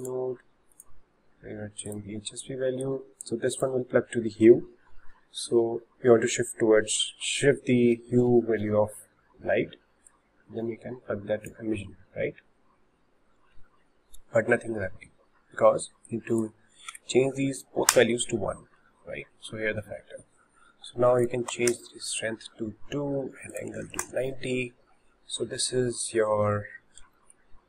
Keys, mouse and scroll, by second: 0.7-3.7 drag, 10.1-11.5 drag, 16.1-19.1 drag, 21.2-26.6 drag, 27.2-27.6 shift+middle drag.